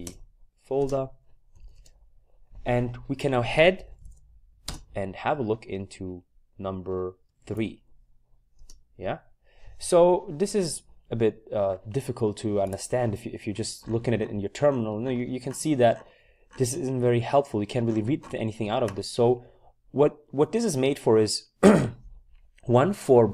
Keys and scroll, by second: 0.0-2.2 typing, 3.5-6.0 typing, 7.3 typing, 8.5 typing, 10.9 typing.